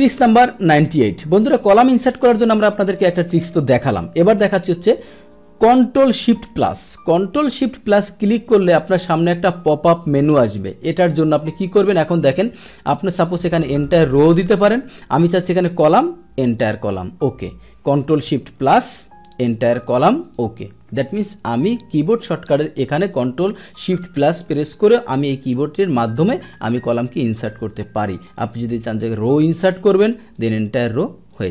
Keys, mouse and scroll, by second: 8.2-9.4 drag, 13.2 click, 15.7 click, 16.5 click, 19.8 click, 20.2 click, 28.1 click, 30.3 click, 31.3 click.